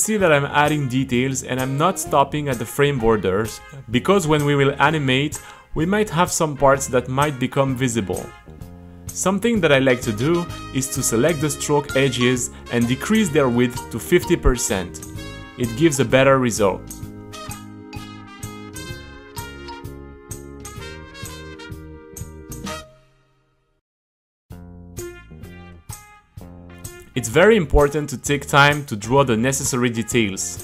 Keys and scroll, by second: 3.8 super+r, 8.3 g, 15.4 w, 16.3 KP_5, 16.4 Return, 17.3 c, 18.4 Return, 18.5 c, 19.2 t, 20.1 super+r, 21.1-22.9 typing, 23.8 Delete, 24.1-30.6 typing.